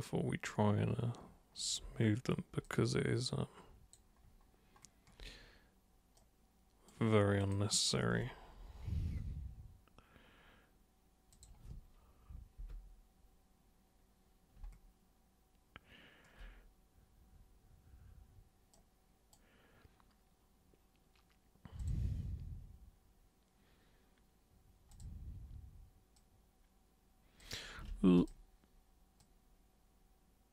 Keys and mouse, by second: 2.6-3.9 alt+super+drag, 6.1 super+right click, 7.4 super+click, 11.3 super+click, 18.7 super+right click, 21.7 super+click, 24.9 super+click, 26.2-27.4 super+drag, 27.9 ctrl+super+z, 28.1 super+click, 29.2-30.5 super+drag.